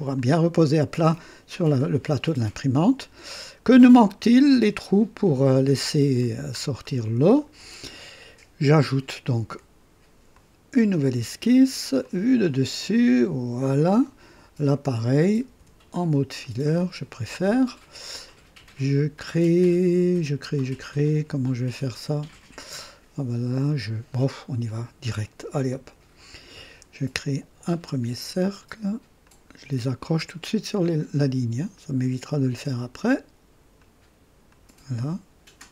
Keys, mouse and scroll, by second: 0.2-1.1 drag, 1.8-3.6 drag, 5.8-6.1 scroll up 1, 6.2 scroll down 1, 6.8-7.5 right drag, 10.3 click, 12.0 click, 12.8 click, 14.0-14.8 right drag, 14.7 click, 15.6 &, 16.4 click, 25.6 click, 28.4 click, 29.2 click, 30.7 click, 31.7 click, 33.7 click, 34.5 click.